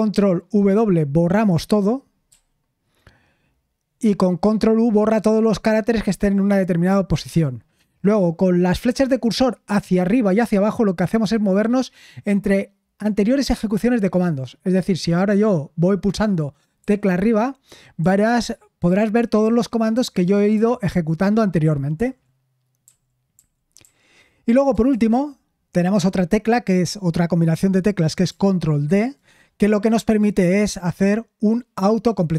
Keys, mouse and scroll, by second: 2.3 ctrl+w, 19.9 Up, 20.5 Up, 23.3 Up, 23.8 Up, 24.9 BackSpace, 28.8 ctrl+d.